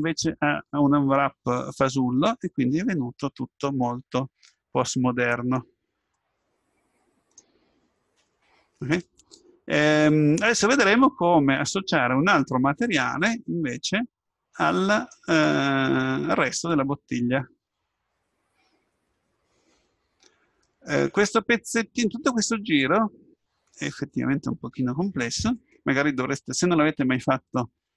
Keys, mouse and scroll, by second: 0.8 scroll up 1, 2.4-4.0 scroll down 1, 4.5-5.6 scroll up 1, 5.6-8.1 middle drag, 9.0-10.8 middle drag, 14.3-16.5 middle drag.